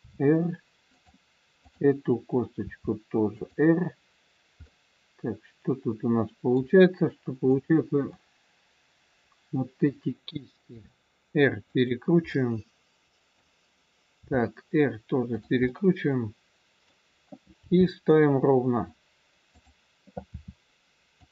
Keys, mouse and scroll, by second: 1.5 click, 2.5 r, 4.6 middle click, 7.5 click, 8.2 middle click, 10.6 r, 12.2 middle click, 14.2 r, 15.7 middle click, 17.7 g, 20.3 r.